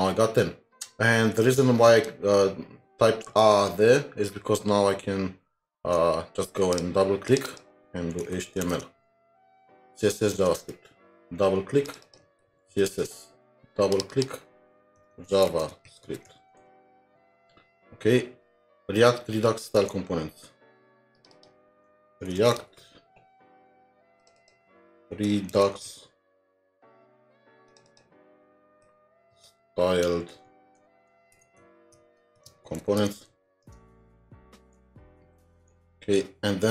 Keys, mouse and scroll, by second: 0.4-2.2 scroll up 2, 3.4 alt+Tab, 5.9 alt+Tab, 7.3 double click, 8.2-9.0 typing, 9.1 alt+Tab, 10.4 alt+Tab, 12.0 double click, 12.7-13.4 typing, 14.1 double click, 15.1-17.2 typing, 19.8 alt+Tab, 21.3 double click, 22.2-23.1 typing, 23.5 scroll down 1, 24.4-26.4 typing, 24.4 double click, 26.6 scroll down 1, 27.8 typing, 27.9 double click, 29.1-35.8 typing.